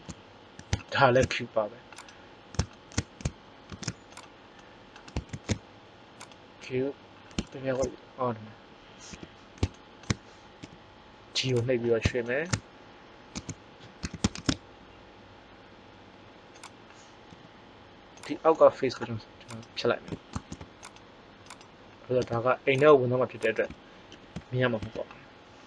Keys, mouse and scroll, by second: 3.6 shift+s, 5.2 shift+a, 9.0 KP_1, 10.6 g, 11.6-12.5 drag, 13.3 Tab, 13.9 s, 17.2 g, 19.4 click, 20.3 ctrl+Tab, 22.3 x, 23.3 click, 24.1 ctrl+l, 24.8 KP_1.